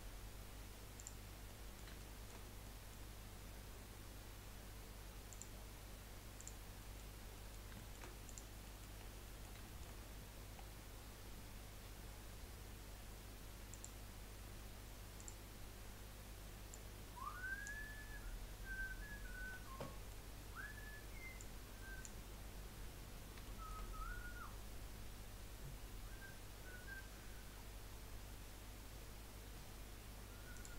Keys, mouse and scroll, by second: 1.5 middle click, 3.9-5.3 middle drag, 5.3 click, 6.5 click, 6.8-7.9 middle drag, 8.3 click, 8.6 middle click, 9.1 scroll down 2, 9.2 middle click, 9.9 scroll up 2, 10.5-12.3 scroll down 2, 12.3-13.7 scroll up 1, 13.7-19.0 drag, 19.0-19.5 scroll up 1, 19.5-20.3 middle drag, 20.3-21.4 scroll up 1, 21.4 click, 22.3-23.1 scroll up 5, 23.1-23.4 scroll down 1, 23.4-26.6 shift+middle drag.